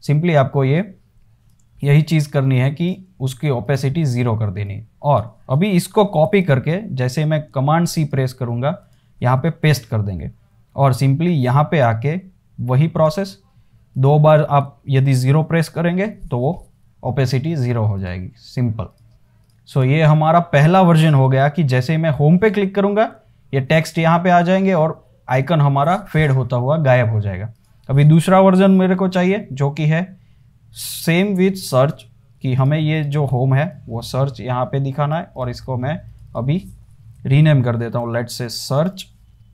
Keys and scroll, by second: 6.3 super+c, 6.6 super+c, 6.7 super+c, 8.0 space, 9.5 super+v, 15.9 typing, 29.3 super+d, 37.2-39.5 typing.